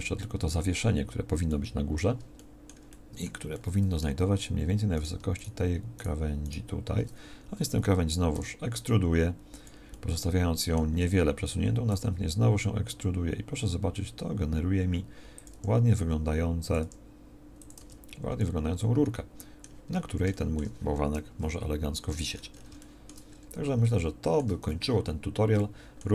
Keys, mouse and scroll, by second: 0.4 Tab, 8.3 e, 11.8 e, 15.4 e, 16.7 e, 17.7 Tab, 21.2 KP_1.